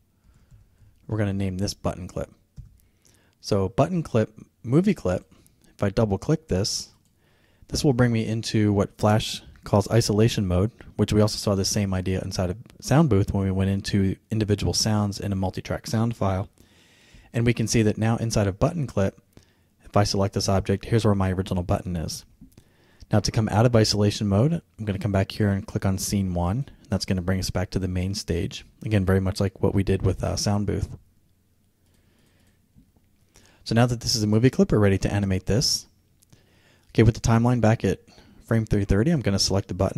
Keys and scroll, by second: 0.3 shift+c, 2.6 Return.